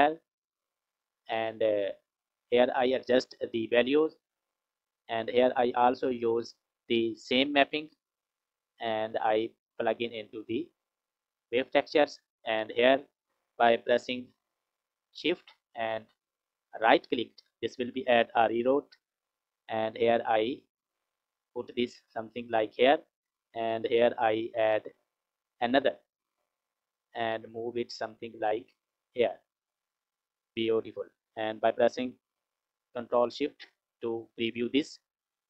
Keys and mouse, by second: 2.3 click, 5.4 click, 6.3 click, 8.2-11.1 drag, 16.4 shift+click, 19.1 g, 25.0 shift+click, 25.3 shift+click, 27.1 g, 31.3 click, 33.8 ctrl+shift+click.